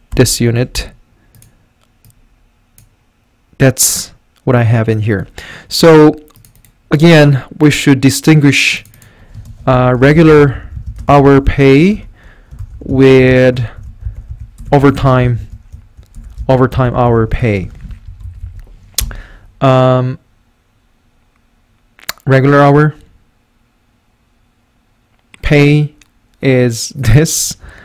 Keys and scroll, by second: 0.1 Return, 9.4-19.5 typing, 18.1 Right, 18.3 Up, 18.4 Up.